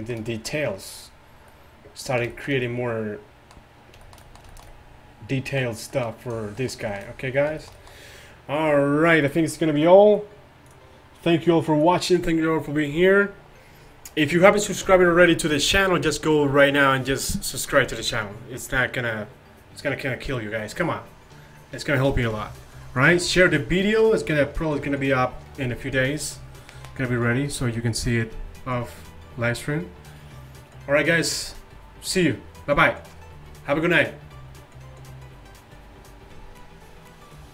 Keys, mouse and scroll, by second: 3.3-4.7 middle drag, 6.7-7.1 middle drag, 7.5 middle click.